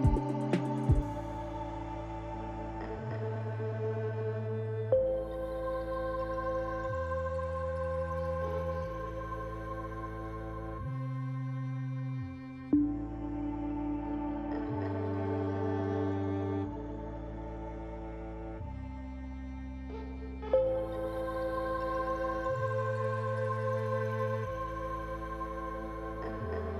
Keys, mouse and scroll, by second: 0.7 KP_7, 4.1 g, 8.6 click.